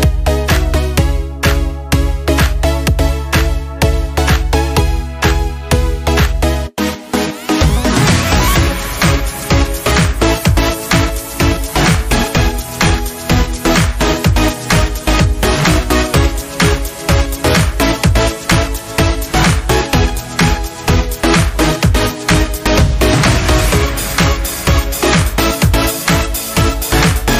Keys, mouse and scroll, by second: 0.8 click, 3.5 click, 4.5-5.7 scroll up 1, 5.7-16.7 drag, 18.1 Up, 24.4-26.2 drag, 26.2 alt+Caps_Lock.